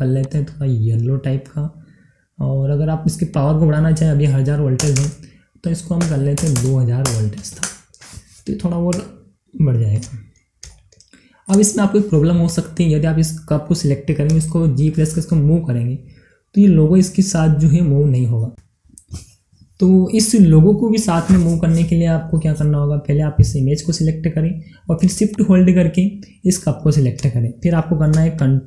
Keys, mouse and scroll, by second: 8.8-10.6 middle drag, 10.6 shift+middle click, 11.5 scroll up 1, 12.4 click, 14.2 g, 18.2 right click, 23.4-25.3 middle drag, 25.3 click, 28.3 shift+click.